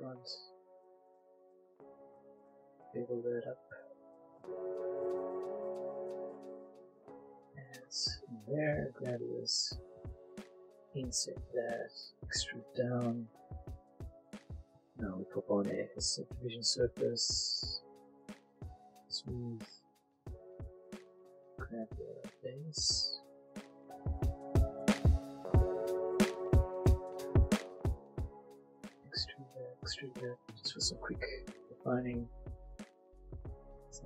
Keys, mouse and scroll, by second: 0.9 ctrl+b, 3.3 click, 3.5 middle click, 4.9 ctrl+r, 5.3 click, 5.3 click, 7.3 click, 7.8 shift+middle click, 8.4 middle click, 9.0 click, 9.9 shift+i, 11.0 click, 11.4 e, 12.2 click, 12.4 middle click, 13.4 click, 13.8 middle click, 14.6 Tab, 15.4 click, 17.3 click, 17.9 right click, 19.0 click, 19.2 middle click, 20.6 Tab, 20.8 middle click, 22.3 click, 22.5 middle click, 24.6 click, 24.9 middle click, 25.4 click, 25.8 middle click, 26.1 click, 26.8 middle click, 27.2 click, 27.5 middle click, 28.5 e, 29.4 click, 29.5 e, 29.8 click, 30.0 Tab, 30.2 middle click, 31.7 Tab, 32.0 middle click, 32.5 click, 33.4 shift+click, 33.7 shift+click.